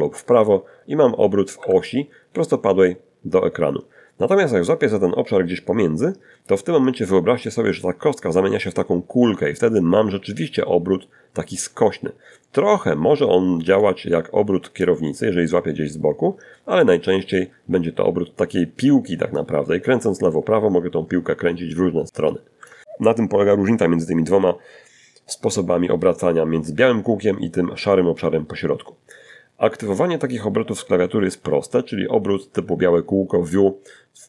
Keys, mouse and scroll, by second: 7.8-12.2 drag, 13.0-21.3 drag, 21.0 Escape, 33.2 r.